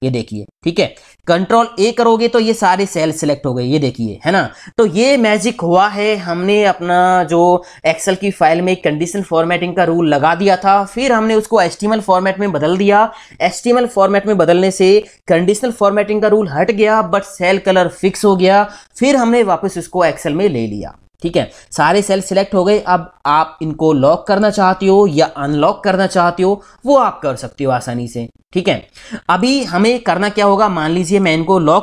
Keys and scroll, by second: 2.1 ctrl+a.